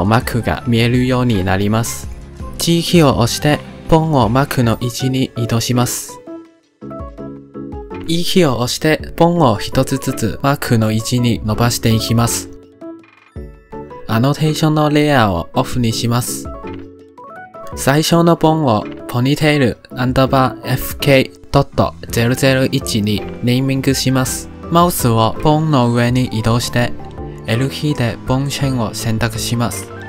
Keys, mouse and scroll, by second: 0.8-2.0 drag, 2.5 g, 4.8 click, 5.2 g, 6.6 shift+middle click, 6.9 shift+middle click, 7.1 click, 7.4 g, 7.6 g, 8.2 click, 8.4 e, 10.0-11.1 shift+middle drag, 11.1 e, 12.8 shift+middle click, 12.8 e, 13.1 shift+middle click, 13.1 e, 13.5 e, 13.8 shift+middle click, 14.5-17.4 drag, 18.3 click, 18.5-20.0 drag, 27.5 l, 29.8-30.0 right drag.